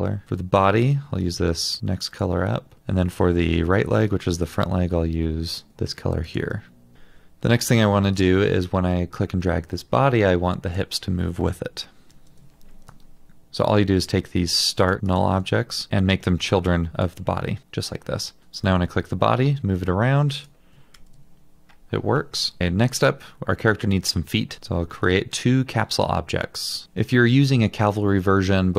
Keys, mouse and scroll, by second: 6.9 double click, 12.1 ctrl+z, 15.1 ctrl+click, 18.9 double click, 21.0 ctrl+z, 24.6 alt+click.